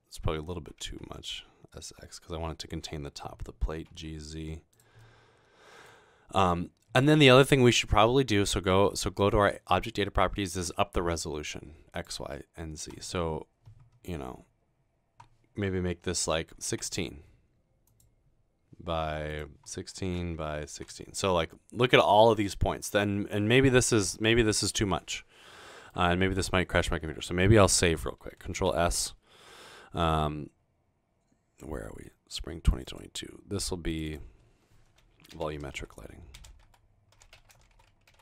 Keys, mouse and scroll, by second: 0.5-1.3 typing, 3.5-4.2 typing, 4.7 click, 5.0-5.9 middle drag, 9.6 click, 11.9 click, 16.6-17.4 typing, 17.9 click, 19.8-21.2 typing, 22.6-24.7 typing, 25.2 middle click, 28.6 ctrl+s, 35.1-38.2 typing.